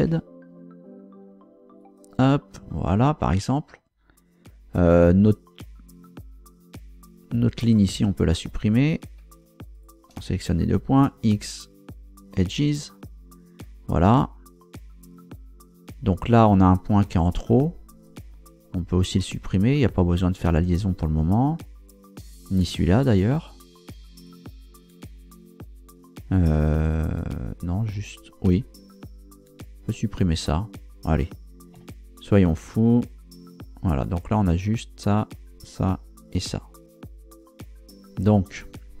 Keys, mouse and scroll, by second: 0.0 z, 1.8 click, 8.9 shift+right click, 9.7 shift+right click, 11.0 x, 12.4 click, 18.0 right click, 24.2 shift+right click, 31.7 x, 33.0 click.